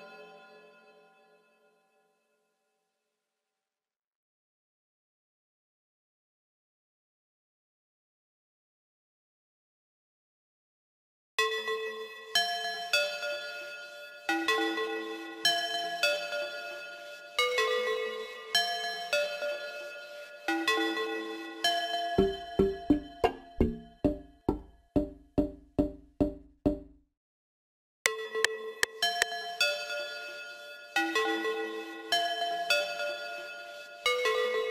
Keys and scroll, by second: 15.1 ctrl+s.